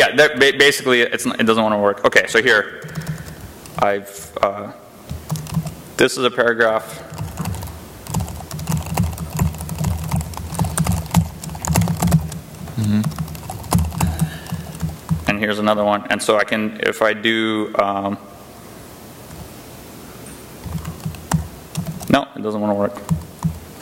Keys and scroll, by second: 1.0 j, 1.4 k, 2.3 shift+a, 2.6 Return, 2.8 Return, 2.9 Return, 3.0 Return, 4.0 ctrl+i, 5.1 Return, 5.3 ctrl+[, 5.9-16.2 typing, 12.9 Return, 19.1 o, 20.2-23.8 typing, 21.7 ctrl+[.